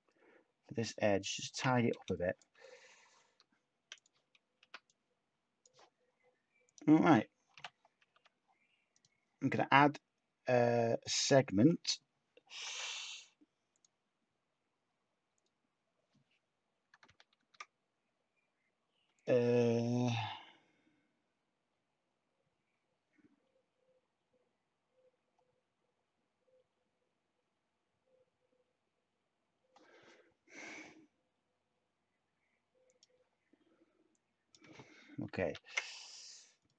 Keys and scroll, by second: 1.9 /, 7.5 Tab, 7.5 a, 8.1 Tab, 17.3 ctrl+z, 35.5 ctrl+z.